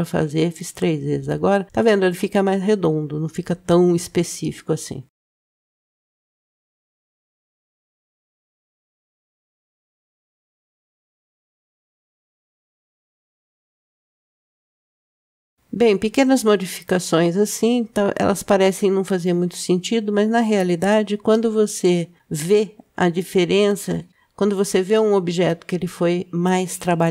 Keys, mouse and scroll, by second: 5.4 click, 5.9 Tab, 6.1 click, 6.3 click, 6.6 ctrl+b, 7.7 click, 8.1 shift+middle click, 8.6 middle click, 9.1 shift+click, 9.7 ctrl+b, 10.9 click, 12.0 ctrl+b, 13.9 Tab, 14.3 middle click, 15.0-16.9 scroll down 2, 22.2 click, 24.6 Tab, 25.8-26.8 middle drag, 26.9-27.1 scroll up 1.